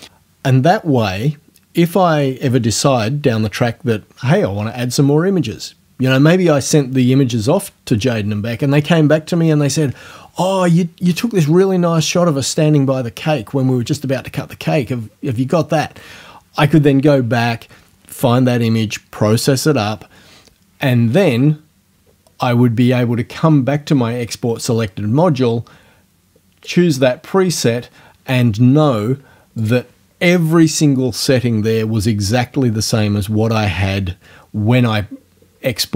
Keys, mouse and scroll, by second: 0.0-0.1 typing, 26.7 click, 29.6 click.